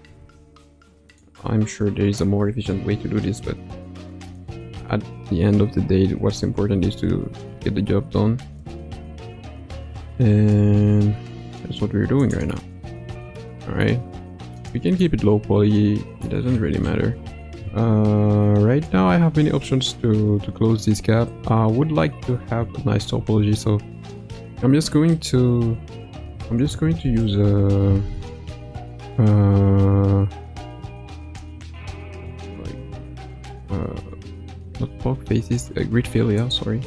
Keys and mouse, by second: 0.0 g, 1.3 middle click, 2.7 KP_Decimal, 3.4 middle click, 6.5 e, 10.5 g, 12.5 middle click, 13.8 middle click, 15.0-16.3 middle drag, 23.1 ctrl+f, 28.4 ctrl+f, 32.4 ctrl+f, 34.3 ctrl+f.